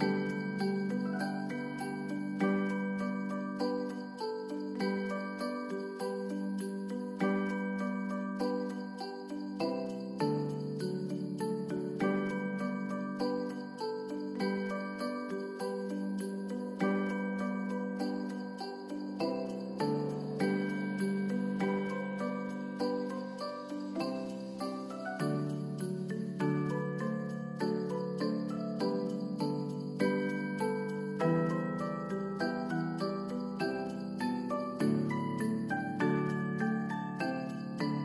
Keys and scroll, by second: 3.5 ctrl+s, 7.4 ctrl+d, 21.4 s, 25.3 ctrl+s, 31.2 ctrl+d.